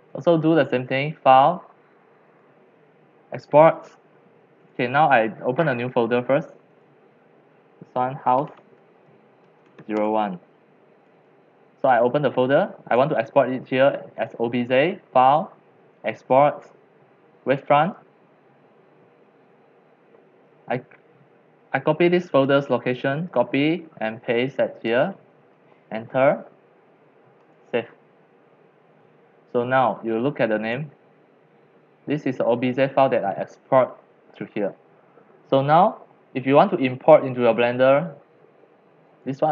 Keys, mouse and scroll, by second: 0.0-0.6 middle drag, 0.6 click, 2.3 click, 2.6-5.1 drag, 5.1 right click, 5.3-5.9 right drag, 5.9-6.5 drag, 6.7 click, 8.1-9.9 typing, 10.0 Return, 11.0 click, 11.2 click, 11.8 click, 12.0-12.3 drag, 12.9 click, 13.3 click, 14.2-14.6 drag, 15.2 click, 16.1 click, 18.3-21.2 drag, 22.3 click, 23.4 ctrl+c, 24.5-25.0 drag, 25.0 ctrl+v, 25.5 Return, 27.4 click, 28.1-35.5 drag, 35.6 click, 36.1-39.5 drag.